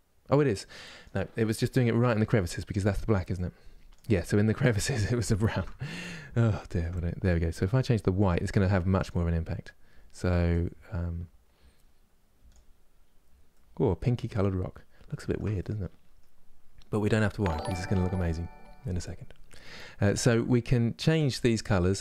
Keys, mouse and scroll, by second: 1.2 scroll up 2, 3.1-10.2 drag, 12.5 scroll down 1, 13.2 middle click, 14.0-14.8 scroll up 3, 14.8-22.0 shift+middle drag.